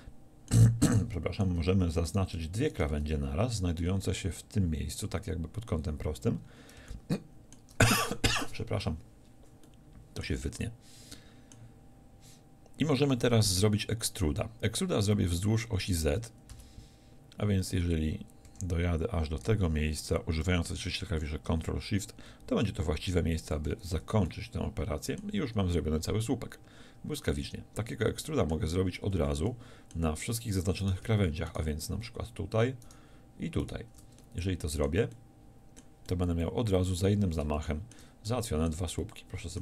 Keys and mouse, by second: 2.0-3.7 drag, 4.0 z, 15.8 e, 23.5-25.3 middle drag, 25.3 z, 28.0-29.5 middle drag, 29.2 z, 37.1 z.